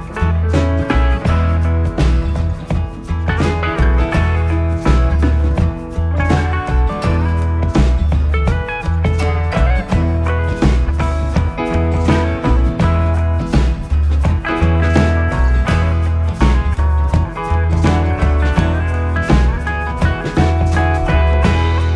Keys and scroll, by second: 3.3 ctrl+z, 3.8 3, 5.0 4, 11.1 ], 12.6 4, 18.8 3, 19.8 ], 20.4 shift+f.